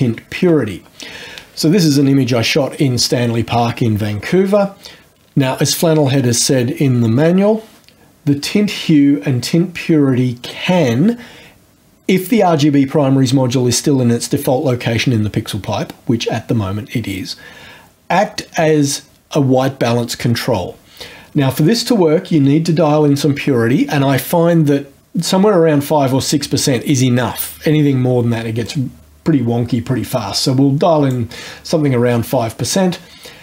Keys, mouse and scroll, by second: 28.6-31.3 drag.